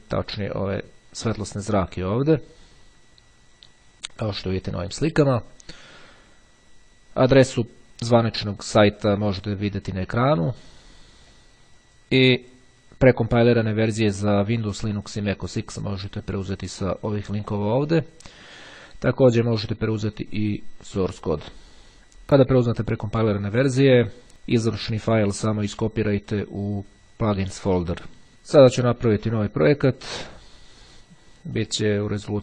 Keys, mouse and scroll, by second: 3.2-4.6 scroll up 2, 5.2-6.6 scroll up 2, 9.6-10.6 scroll up 2, 11.4-12.4 drag, 12.5 click, 14.9-16.1 scroll down 1, 28.8 click, 30.0-31.1 drag, 31.7 click.